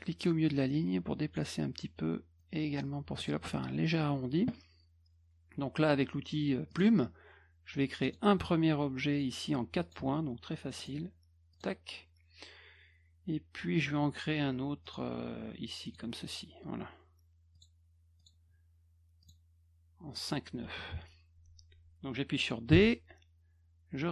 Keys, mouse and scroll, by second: 0.5 click, 2.4 click, 6.7 click, 8.0 click, 9.1 click, 9.8 click, 10.8 click, 11.5 click, 14.8 click, 15.8 click, 17.5 click, 18.2 click, 19.2 click, 20.2 click, 22.7 d.